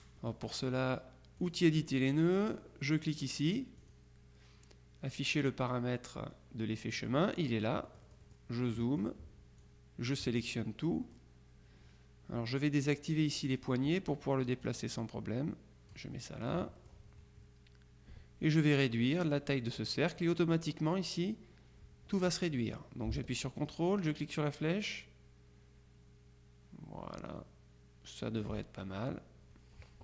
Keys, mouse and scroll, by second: 1.4 click, 3.9 click, 8.0 click, 9.7-10.7 drag, 11.1 click, 13.5 click, 14.7-16.5 drag, 16.9 click, 24.2-29.0 ctrl+drag.